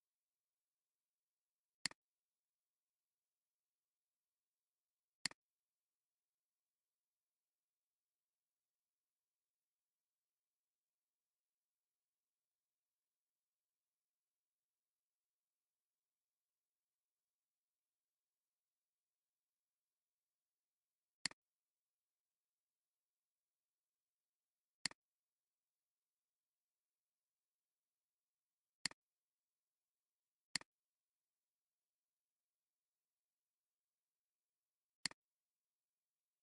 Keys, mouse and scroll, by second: 23.4 scroll up 1, 30.4 space.